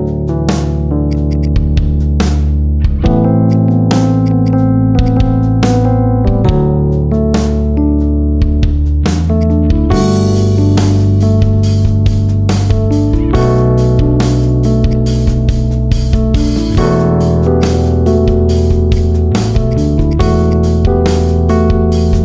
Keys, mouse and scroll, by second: 0.5-0.9 middle drag, 0.9 click, 1.1 alt+shift+click, 1.5 middle click, 2.1 alt+shift+click, 2.6 ctrl+b, 3.7 Tab, 3.9 scroll down 2, 4.1 right click, 4.9 click, 5.6 /, 5.9-6.4 scroll down 1, 6.4 KP_7, 6.7-7.4 scroll down 1, 7.4 g, 9.4-10.4 middle drag, 10.4 KP_7, 11.2 shift+d, 15.6 shift+d, 17.6-18.8 middle drag, 18.8 drag, 19.0-19.5 middle drag, 19.5 click, 19.9 shift+drag, 20.3 shift+click, 21.7 ctrl+j.